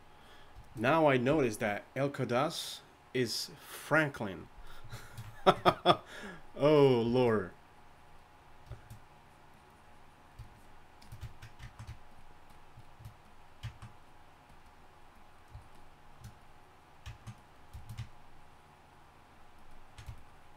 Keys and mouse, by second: 8.2-17.1 drag, 17.9-20.5 drag.